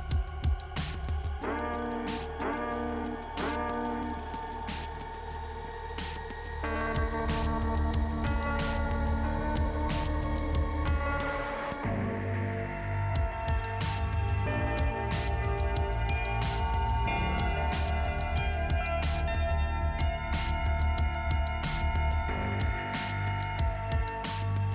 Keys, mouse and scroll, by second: 0.4 alt+i, 1.5 p, 2.7 scroll down 1, 4.2 middle click, 5.2-5.7 scroll up 2, 6.4 middle click, 6.8 click, 8.1 click, 9.6 click, 9.7 click, 9.8 double click, 12.9 click, 15.2 click, 15.4 click, 16.4 click, 16.9 click, 17.0 double click, 17.1 double click, 17.2 double click, 17.3 double click, 17.7 double click, 18.0 double click, 18.0 double click, 18.1 double click, 18.2 double click, 18.3 double click, 18.5 double click, 19.2 click, 21.2 click, 22.7 click, 22.8 click, 23.0 double click.